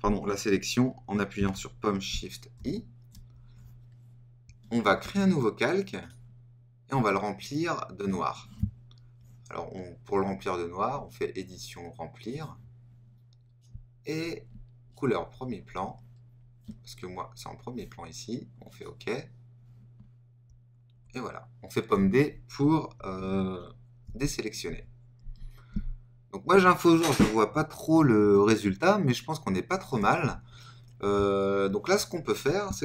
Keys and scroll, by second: 2.5 shift+super+i, 20.9 super+d, 24.0 super+-.